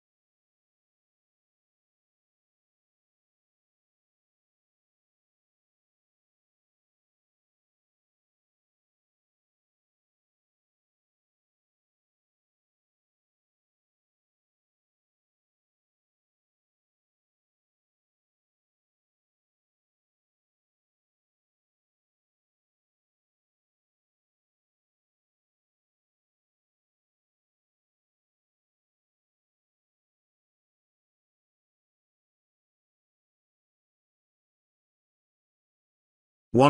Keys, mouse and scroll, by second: 0.4-3.8 drag, 6.5-12.2 drag, 14.4 click, 14.8 space, 15.0-15.6 ctrl+drag, 22.5-27.0 drag, 31.5 space, 31.7-32.6 ctrl+click, 32.8-33.6 ctrl+click, 33.7-34.7 ctrl+drag.